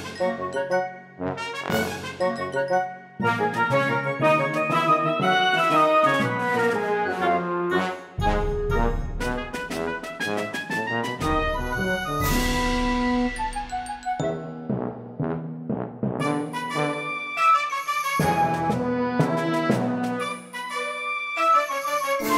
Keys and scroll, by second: 13.5 shift+o, 13.8 u, 15.5 Return.